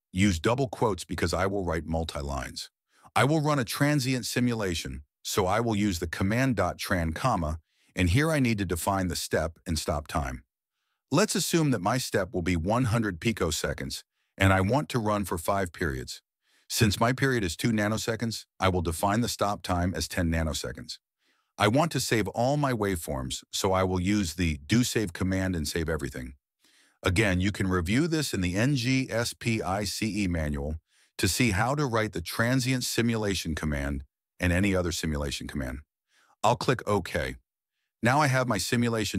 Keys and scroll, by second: 0.6 Return, 5.2-6.7 typing, 7.8-11.5 typing, 21.6 Return, 22.7-25.0 typing, 38.9 m.